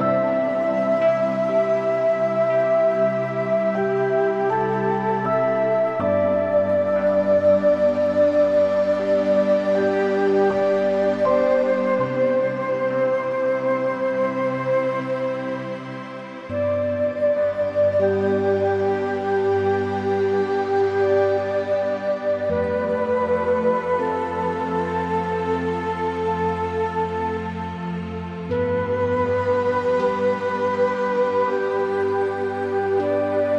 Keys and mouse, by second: 1.3-3.2 drag, 4.1 middle click, 5.9 click, 7.8 click, 10.0 click, 10.8 middle click, 12.7-14.4 drag, 14.9 shift+middle click, 15.4 shift+middle click, 17.0 Tab, 17.1 click, 17.3-18.5 middle drag, 18.9 click, 19.2-20.3 middle drag, 20.4 click, 21.0 Tab, 21.1 click, 21.9-24.5 drag, 23.9 BackSpace, 26.2 click, 26.8 click, 27.6-28.6 middle drag, 30.2 shift+middle click, 30.4 middle click, 31.5 shift+middle click, 32.0 shift+a, 33.3 s.